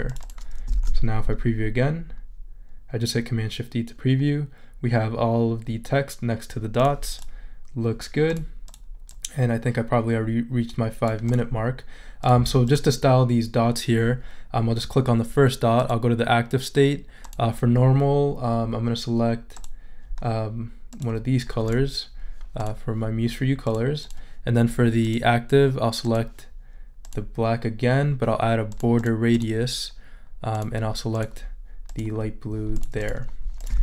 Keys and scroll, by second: 1.1 shift+super+e.